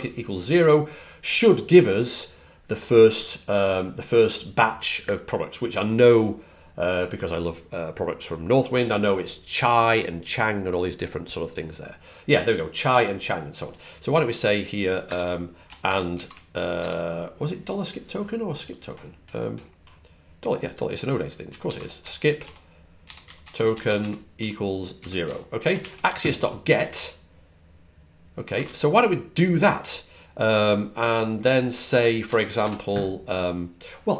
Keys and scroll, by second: 14.9 BackSpace, 22.6-25.1 typing, 29.0-29.7 typing, 32.1-32.5 typing.